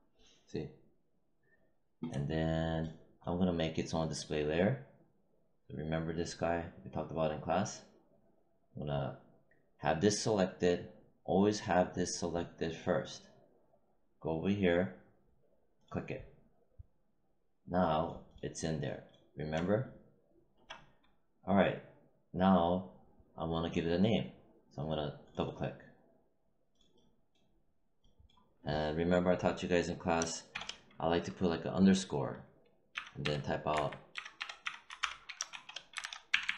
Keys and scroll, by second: 30.4 shift+-, 32.6-36.5 typing.